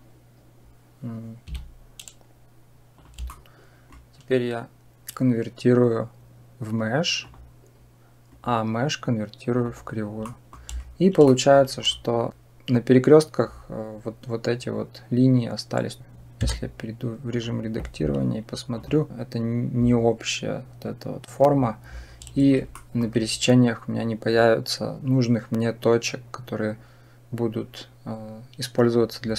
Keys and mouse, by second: 3.1 shift+click, 3.9-7.2 drag, 8.1-9.6 right drag, 10.2 middle click, 11.1 shift+middle click, 16.3 Tab, 18.7 click, 22.7 shift+middle click.